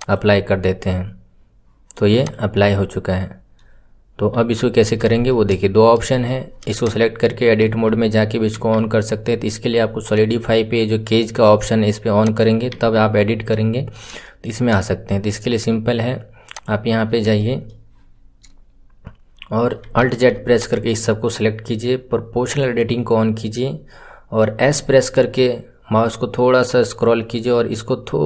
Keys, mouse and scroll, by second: 2.1 click, 2.5-4.3 middle drag, 4.3 KP_1, 4.7-5.0 scroll up 4, 5.0-5.7 shift+middle drag, 5.7 scroll down 2, 6.0 shift+middle click, 6.8 click, 12.1 click, 13.5 scroll up 2, 14.2-16.5 shift+middle drag, 16.5 click, 17.3-20.0 shift+middle drag, 20.0 alt+z, 20.5 click, 22.4 click, 23.6 scroll down 2, 24.6 s.